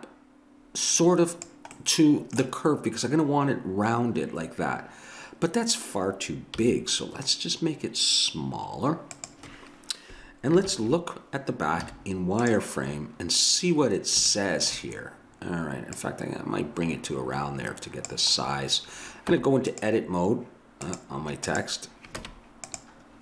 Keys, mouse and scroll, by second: 1.8-4.0 middle drag, 6.6 s, 10.7 ctrl+KP_1, 11.8 z, 16.0-17.8 drag, 18.6 middle click, 19.4 Tab, 19.7 right click, 20.9 right click, 22.2 Tab.